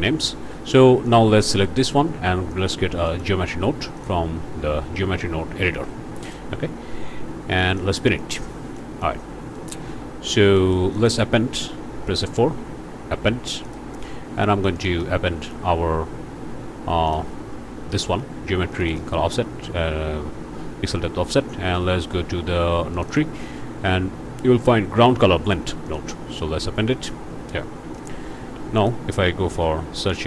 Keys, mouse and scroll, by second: 1.1 click, 2.5 click, 3.1 click, 4.0 click, 6.2 click, 6.7-7.4 scroll up 1, 7.6 click, 8.3 click, 8.6 scroll up 1, 8.8 click, 9.2 scroll down 1, 9.6 click, 10.6 click, 12.1 F4, 13.7 click, 14.8 click, 15.6 scroll down 1, 16.1 scroll up 1, 17.1 click, 18.7 click, 22.0 scroll down 1, 22.9 click, 25.9 click, 27.0 click, 27.9 click, 28.3 shift+a.